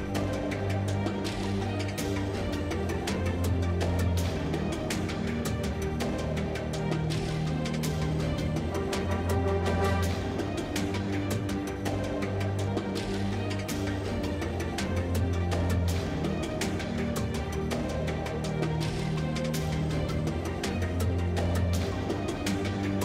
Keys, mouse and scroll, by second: 1.5 ctrl+r, 3.4 ctrl+r, 4.6 Tab, 5.3 a, 7.0 z, 7.7 a, 8.2 x, 8.5 shift+a, 11.8 ctrl+2, 14.8 Tab, 15.5 ctrl+Tab, 18.4 shift+e, 21.5 shift+e, 22.0 z, 22.5 Tab.